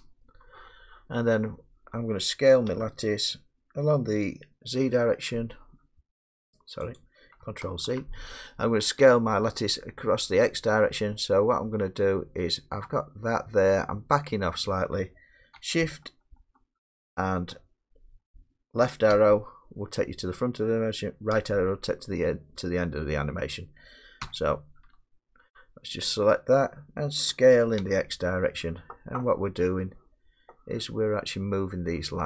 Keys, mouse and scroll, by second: 0.8 KP_4, 2.7 s, 7.0 click, 7.8 ctrl+z, 10.1 middle click, 10.2 middle click, 10.2 middle click, 13.3 middle click, 13.8 middle click, 19.1 Left, 21.3 Right, 27.3 s, 27.8 x.